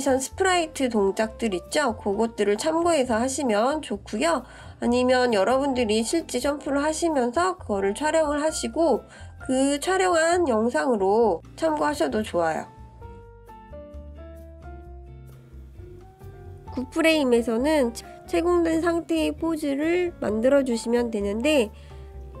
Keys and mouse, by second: 2.8-3.6 middle drag, 4.4 ctrl+KP_3, 5.2-5.8 shift+middle drag, 7.7-8.2 shift+middle drag, 9.7 click, 11.5-13.2 shift+middle drag, 13.3 shift+click, 13.6-14.3 middle drag, 15.3 ctrl+KP_3, 16.5-21.0 drag, 21.2 drag, 21.7 click.